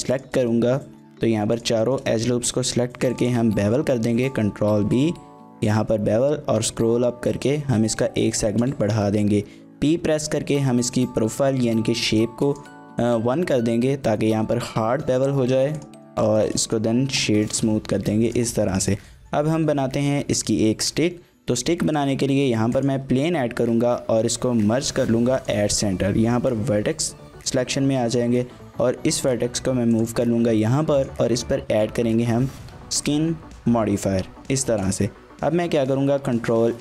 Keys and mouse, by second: 0.5 middle click, 1.5 alt+shift+click, 1.8 shift+middle click, 2.1 middle click, 3.1 alt+shift+click, 4.0 ctrl+b, 10.0 p, 12.4 click, 14.9 shift+click, 15.2 click, 15.4 Tab, 15.8 click, 16.4 shift+middle click, 16.6 middle click, 17.4 shift+middle click, 17.6-18.1 middle drag, 18.3 drag, 18.7 shift+middle click, 18.9 middle drag, 20.0 KP_3, 21.8 shift+a, 23.7 Tab, 24.6 m, 26.1 1, 27.4 a, 28.4 g, 30.0 click, 31.1-33.0 drag, 34.7 shift+middle click, 35.8 ctrl+a.